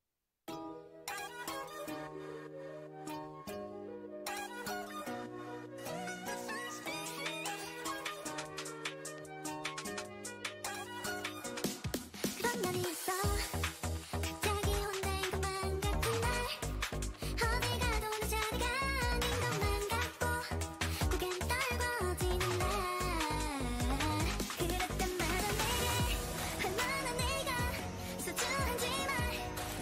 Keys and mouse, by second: 1.0-2.1 drag, 2.1 Tab, 2.2-5.2 drag, 3.2 Tab, 5.2 z, 5.3 click, 6.2 Tab, 8.2 n, 14.7-17.2 drag, 15.9 n, 16.7 s, 18.1 s, 19.8 z, 21.9-29.5 drag, 26.5-28.6 middle drag, 29.2-29.8 right drag.